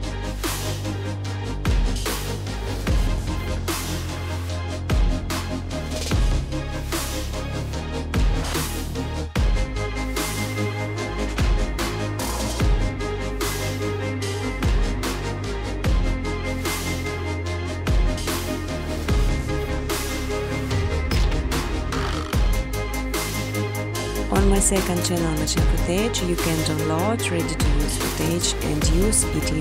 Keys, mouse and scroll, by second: 0.0-0.4 typing, 0.2 click, 0.4 right click, 0.4 scroll down 10, 1.9 click, 1.9 scroll, 3.3 click, 3.9-5.3 typing, 4.2 scroll, 6.7 click, 6.9 click, 8.8 click, 9.6-10.6 typing, 11.4 Return, 13.4 click, 13.9-16.0 typing, 17.7 click, 18.7 click, 21.4 click, 21.9-23.3 typing, 24.0 click, 24.2 click, 25.7 click, 29.5 Tab.